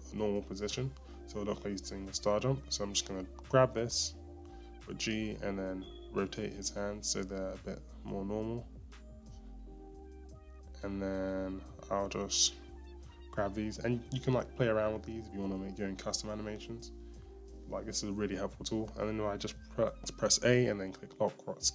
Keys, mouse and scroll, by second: 1.8-3.3 scroll up 1, 3.3 click, 3.3 click, 8.0 g, 8.3 r, 12.1 scroll up 1, 13.1 click, 14.7 g, 18.7 a.